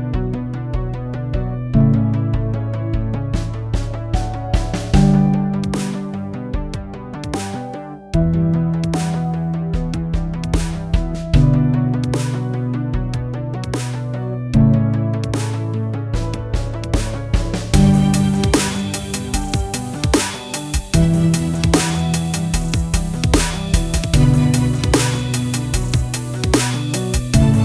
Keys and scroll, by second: 5.9 F9, 8.4-12.7 typing, 18.5-22.1 typing, 22.1 Return, 27.2 typing.